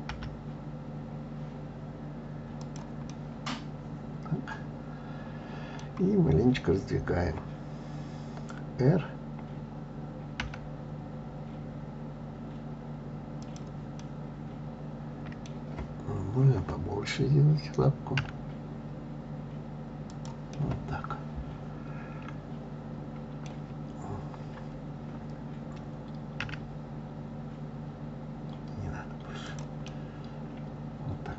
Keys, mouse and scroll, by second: 0.1 g, 3.1-6.1 middle drag, 14.0-17.0 middle drag, 20.5-23.5 middle drag, 26.4 s, 29.8-31.3 middle drag.